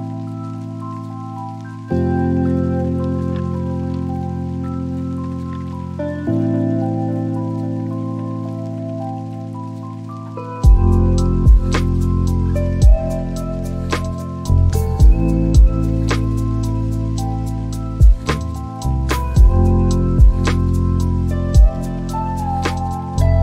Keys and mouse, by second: 13.8 click.